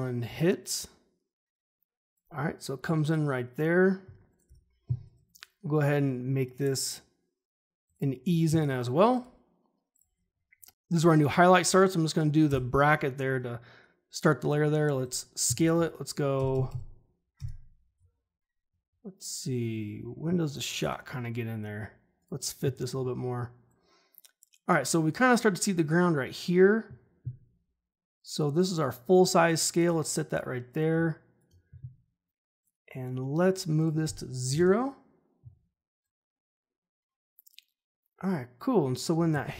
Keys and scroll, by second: 4.4 u, 12.4 [, 16.3 shift+Page_Down, 34.4 0, 34.5 Return, 39.4 ctrl+shift+h.